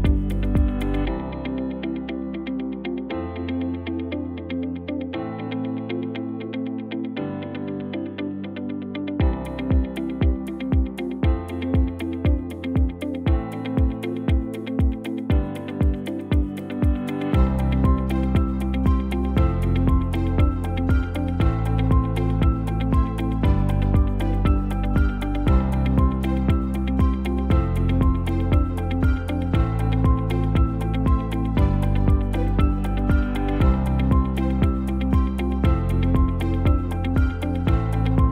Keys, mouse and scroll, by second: 25.6 shift+a.